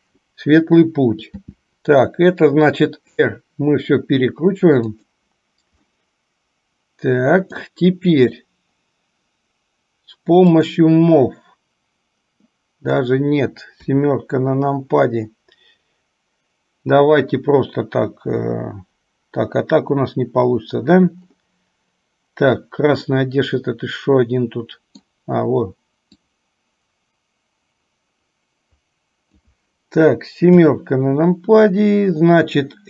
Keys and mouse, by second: 1.6 r, 6.0-7.8 middle drag, 10.7 click, 12.6 middle click, 13.9 KP_7, 23.3-25.3 middle drag, 26.6-29.6 drag, 30.6 KP_7.